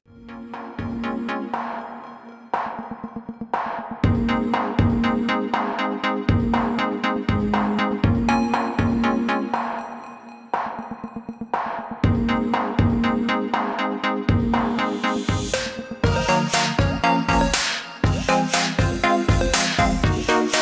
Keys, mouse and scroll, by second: 0.1 click, 3.2-4.1 alt+scroll up 2, 4.1 click.